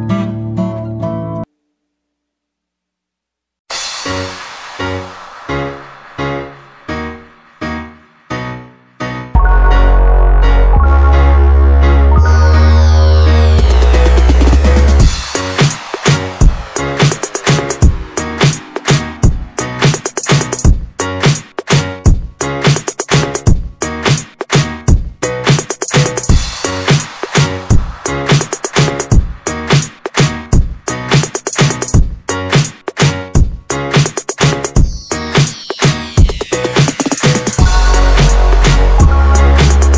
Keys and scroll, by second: 0.0 3, 1.4 space, 4.2 Escape, 5.1 Escape, 9.1 Escape, 9.2 Escape, 11.0-14.2 typing, 13.4 Escape, 15.7 Escape, 15.8-16.7 typing, 20.4 Escape, 20.5-26.0 typing, 21.7 Escape, 23.1 Escape, 28.2 Escape, 28.7-33.0 typing, 32.9 Escape, 33.7 Escape, 34.2-36.0 typing, 35.2 Escape, 37.7-39.8 typing, 39.0 Escape.